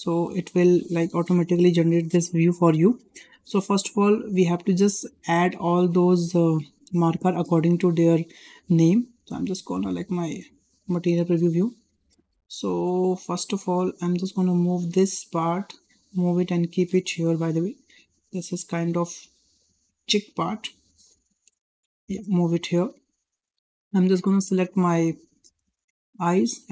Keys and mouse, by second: 3.6-4.2 shift+middle drag, 9.4 click, 11.6 shift+middle click, 12.2 shift+middle click, 14.3 click, 15.3 shift+click, 16.3 g, 19.9 click, 19.9 click, 21.0-21.3 drag, 21.9 g, 23.0 shift+click, 23.8 click, 25.5 l, 26.5 g.